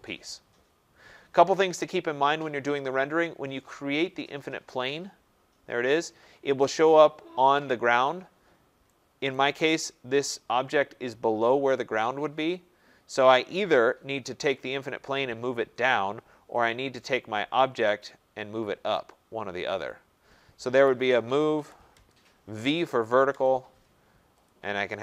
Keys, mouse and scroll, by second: 4.8 click, 6.6 right click, 9.2 right click, 11.9 middle click, 11.9 middle click, 12.0 middle click, 12.0 middle click, 14.2 click, 16.6 click, 17.9 click, 19.8 click, 20.8-21.5 typing, 21.9 Return, 22.9 v, 23.3 Return, 24.4 click.